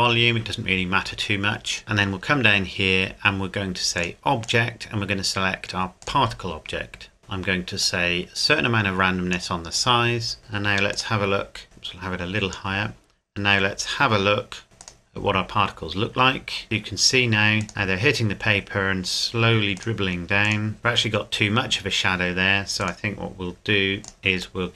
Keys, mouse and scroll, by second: 1.8-4.0 scroll down 1, 4.0 click, 7.8 click, 10.9 click, 14.8 click, 16.6-17.2 scroll up 1, 17.6 click, 17.7 middle click, 19.8 click, 20.8 scroll down 1, 24.2 right click, 24.6 middle click.